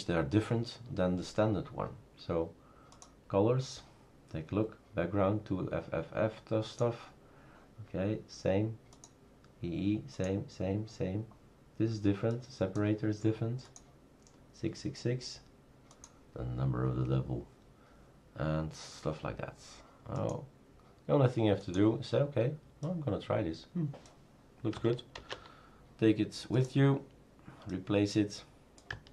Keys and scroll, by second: 25.2 ctrl+c.